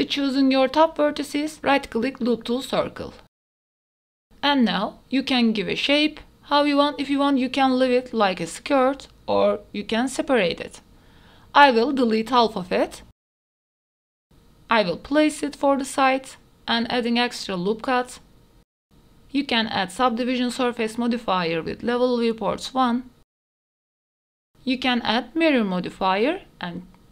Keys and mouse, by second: 0.3 2, 0.7 middle click, 0.8-2.7 right drag, 3.4 click, 3.9 click, 4.0 s, 4.8 click, 5.4 shift+middle click, 5.9 Tab, 6.0 right click, 6.5 middle click, 7.1 middle click, 7.5 s, 7.5 y, 7.7 y, 7.7 g, 8.1 Tab, 8.2 middle click, 8.6 click, 9.5 1, 9.7 middle click, 10.4 KP_1, 11.6-12.7 drag, 13.2 x, 13.5 Tab, 14.2 click, 14.7-18.8 typing, 15.0 click, 16.0 Tab, 16.2 ctrl+r, 16.2 ctrl+z, 16.7 click, 16.8 ctrl+r, 17.1 ctrl+z, 17.1 middle click, 17.6 middle click, 17.6 alt+click, 18.0 ctrl+KP_1, 18.3 ctrl+r, 18.6 Tab, 19.7 click, 20.1-22.2 typing, 20.5 click, 21.8 click, 22.2 click, 22.3 Tab, 22.6 middle click, 23.0 click, 23.8 ctrl+1, 24.0 middle click, 24.3 middle click, 24.4 ctrl+s, 24.7 middle click, 26.4-27.1 drag.